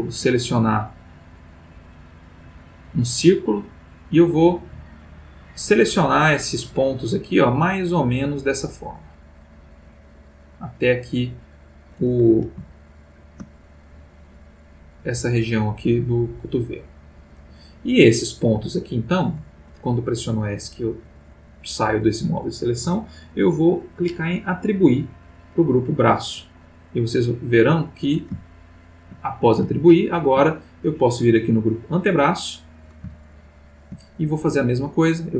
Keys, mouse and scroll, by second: 0.3-11.9 drag, 13.0-13.6 ctrl+middle drag, 14.7 middle click, 17.2 middle click, 18.5 Escape, 25.2 click, 27.1 click, 28.4-29.2 ctrl+middle drag, 29.7-30.5 shift+middle drag, 31.7 click, 33.3-34.0 ctrl+middle drag.